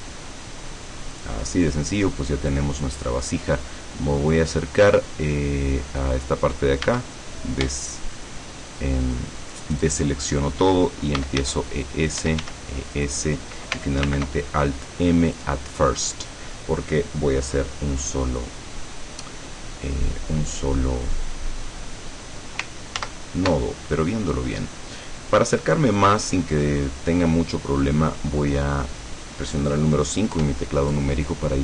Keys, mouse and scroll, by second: 1.2 click, 1.5 middle click, 2.6-2.9 scroll up 2, 3.5-3.9 scroll up 2, 4.4-4.7 scroll up 2, 4.7 scroll down 2, 5.3 scroll up 2, 6.9 a, 9.8 alt+shift+right click, 11.0-13.0 typing, 12.1 click, 13.0 click, 14.1 alt+m, 15.4 click, 17.4-17.8 scroll down 2, 18.0 scroll down 2, 19.0-19.4 scroll up 2, 19.7-20.3 scroll down 4, 20.5-20.8 scroll up 2, 23.1 ctrl+z, 23.9-24.4 ctrl+scroll up 1, 24.4-24.7 scroll down 1, 25.5-25.9 scroll up 1, 26.5 scroll down 1, 26.9-27.9 middle drag, 28.1 scroll down 1, 28.5-29.1 scroll up 2, 30.5 KP_5.